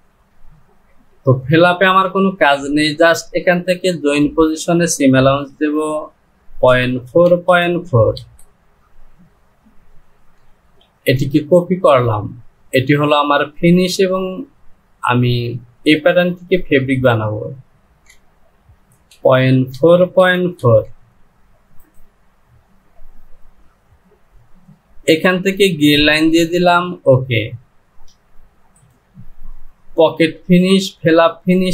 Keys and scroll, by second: 5.6 Down, 18.1 Down.